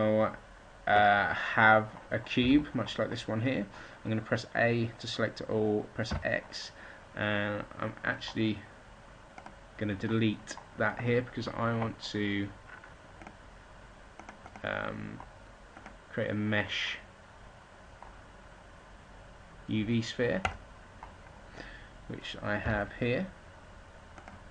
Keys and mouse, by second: 2.3 a, 5.5 right click, 5.9 x, 22.5 g.